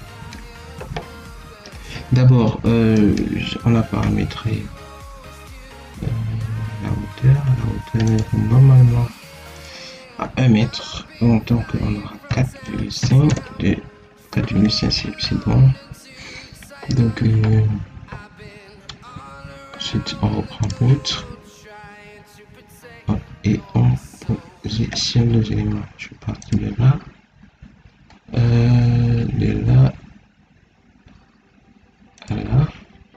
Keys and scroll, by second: 7.1 Escape, 12.2 4, 12.6 ., 12.9 5, 13.2 Return.